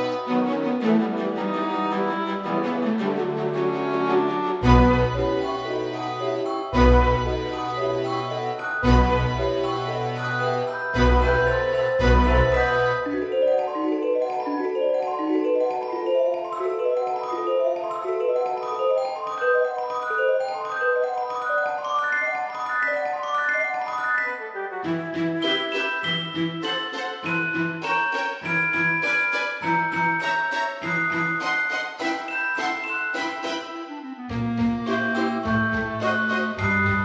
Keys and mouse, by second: 0.5 click, 4.7 right click, 5.3 x, 7.2 click, 7.8 a, 9.2 click, 10.3 click, 11.9 click, 12.6 KP_1, 13.0 KP_3, 13.2 KP_Enter, 13.2 Return, 14.5 Tab, 14.9 middle click, 16.1 middle click, 17.3 F6, 17.9 click, 19.1 click, 20.4 click, 20.8 KP_0, 21.0 KP_Decimal, 21.4 KP_5, 21.8 Return, 21.8 KP_Enter, 22.9 click, 23.1 KP_0, 23.3 KP_Decimal, 23.6 KP_0, 25.4 click, 26.8 click, 27.9 click, 29.4 click, 30.2 right click, 31.1 click, 32.4 right click, 33.0 click, 33.7 right click, 34.3 click.